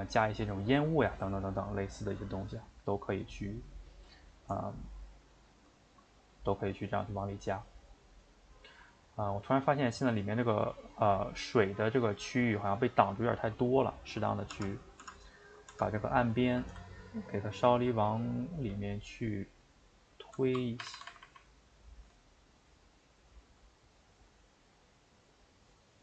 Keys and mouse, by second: 4.3 shift+right drag, 4.6-8.5 ctrl+middle drag, 8.5 click, 9.2-14.1 shift+middle drag, 14.1 click, 14.6 Tab, 15.1 Tab, 15.5 click, 15.9 Tab, 16.3 a, 16.4 a, 17.2 ctrl+right click, 18.8 g.